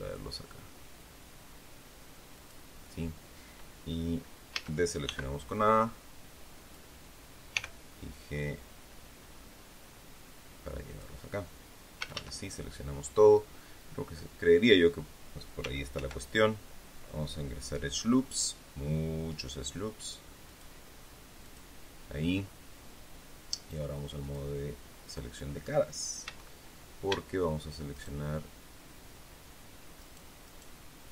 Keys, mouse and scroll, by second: 2.3 click, 4.4 a, 5.0 b, 5.4-6.8 drag, 7.5 g, 10.8 click, 11.9 a, 15.8 ctrl+r, 17.9-18.3 scroll up 2, 18.7-19.1 scroll up 2, 20.4 click, 21.3 click, 24.1 click, 26.1 a, 27.8 alt+shift+right click, 29.9 alt+shift+right click, 30.4 alt+shift+right click.